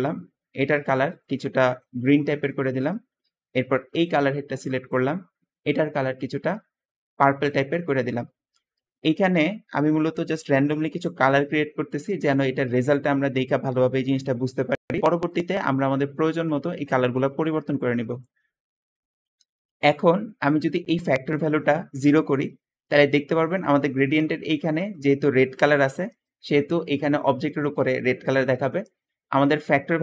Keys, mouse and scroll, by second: 28.4 Escape, 28.5 Escape.